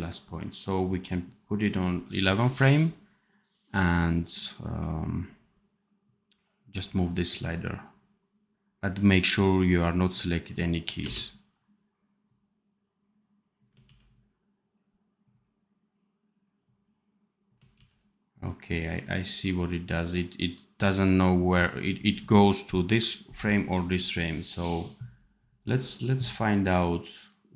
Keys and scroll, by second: 10.9 space, 13.7 ctrl+z, 17.7 ctrl+z.